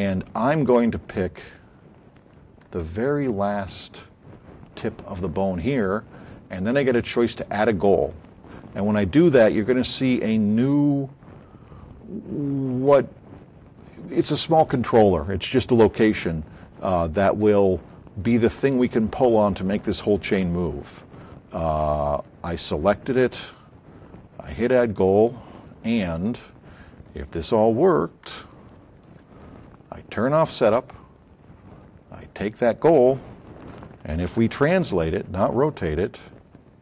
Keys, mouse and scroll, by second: 0.6 middle click, 1.5-2.7 alt+drag, 3.6 click, 24.6 click, 26.3 middle click, 27.4 shift+click, 32.4 click, 34.4 w, 35.0 middle click, 35.9 click.